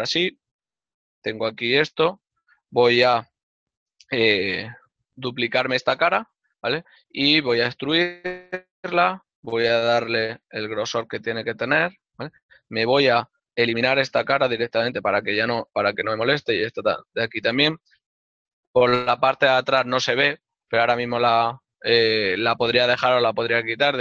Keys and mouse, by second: 1.0 click, 1.1 right click, 1.8 g, 3.7 right click, 3.9 ctrl+middle click, 6.4 d, 6.9 right click, 7.7 e, 11.0 click, 11.1 shift+middle click, 13.5 right click, 15.3 click, 15.4 middle click, 16.8 click, 17.4 shift+middle click, 21.0 right click.